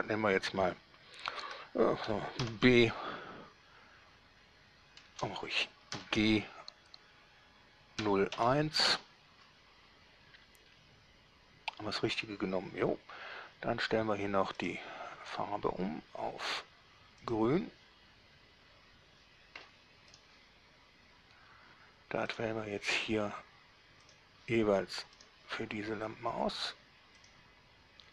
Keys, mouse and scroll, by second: 2.7 shift+b, 5.3 BackSpace, 6.1 g, 8.3 0, 8.7 1, 9.1 Return, 14.8 click, 17.5 click, 20.4 middle click, 22.5 click, 24.3 click, 25.5 middle click, 27.5 click.